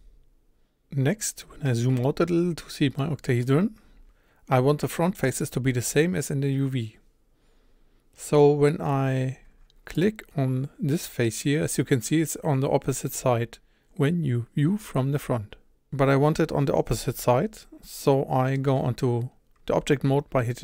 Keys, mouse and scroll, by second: 0.6 a, 1.0-2.0 scroll down 12, 2.0 shift+middle click, 2.4-3.0 scroll up 2, 3.0 shift+middle click, 3.8 scroll up 1, 4.8-9.5 middle drag, 9.5 3, 10.0 click, 13.0-20.6 middle drag.